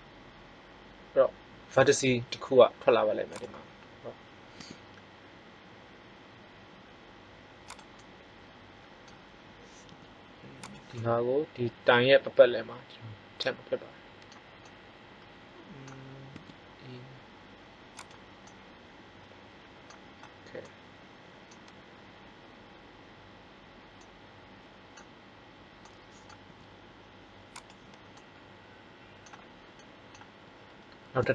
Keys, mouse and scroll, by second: 4.4 e, 7.8-9.4 drag, 9.8 g, 10.8 click, 16.3 e, 18.0 click, 18.7-20.0 middle drag, 26.4 g, 28.2 middle click.